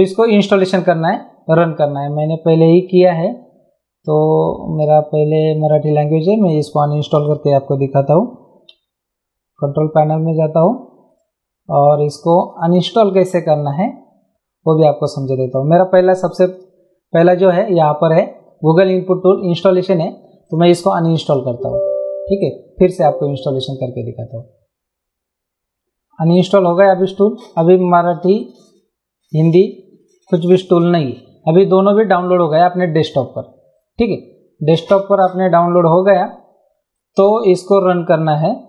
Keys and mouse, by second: 2.2 click, 4.8 click, 6.5 click, 12.7 click, 16.5 click, 20.4 right click, 21.2 click, 26.3 click, 28.4 click, 30.6 click, 33.0 click, 35.5 click, 36.2 right click, 36.9 click.